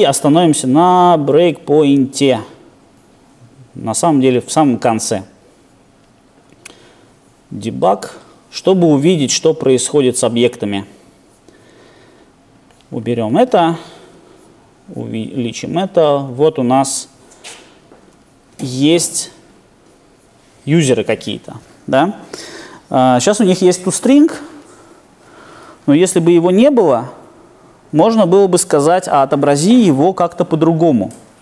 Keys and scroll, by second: 4.1 super+F8.